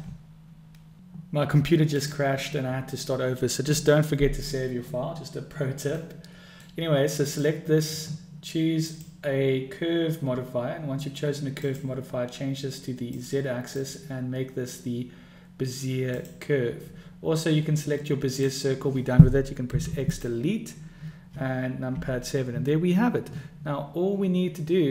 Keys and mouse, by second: 5.9 click, 5.9 right click, 6.2-6.6 middle drag, 7.2 click, 8.7-10.6 drag, 11.6-13.4 drag, 13.8-16.4 drag, 18.3 click, 19.6 x, 21.9 KP_7.